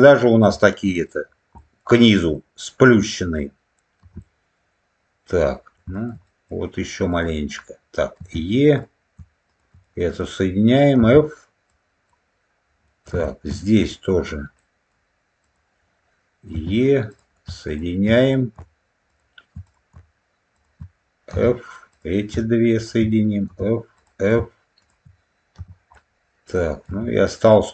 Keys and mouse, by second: 0.4 middle click, 1.5 middle click, 2.2-3.2 middle drag, 3.9 f, 4.1-5.3 middle drag, 5.8 shift+middle click, 6.2 middle click, 7.0 click, 8.1 e, 8.6 click, 9.4 shift+click, 9.7 middle click, 10.9 f, 11.6 click, 12.8 middle click, 13.2 shift+middle click, 13.8 middle click, 14.5 middle click, 15.3 click, 16.4 e, 17.0 click, 17.6 shift+click, 18.1 click, 19.0 shift+click, 19.6 click, 20.5 shift+click, 21.2 f, 21.8 click, 22.7 shift+click, 23.4 f, 23.9 click, 24.7 shift+click, 25.8 middle click, 26.7 shift+middle click.